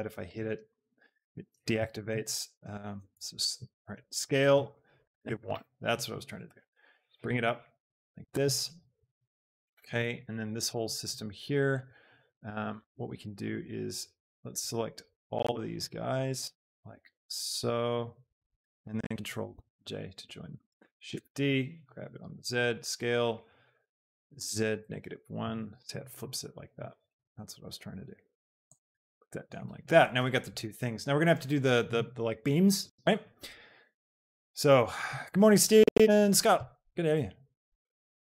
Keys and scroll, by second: 0.5 shift+s, 1.9 Escape, 5.3 KP_1, 5.7 Return, 6.4 g, 6.8 z, 19.6 ctrl+j, 20.7 shift+d, 21.8 z, 22.9 s, 24.7 KP_Subtract, 25.1 KP_1, 25.5 Return, 26.9 z.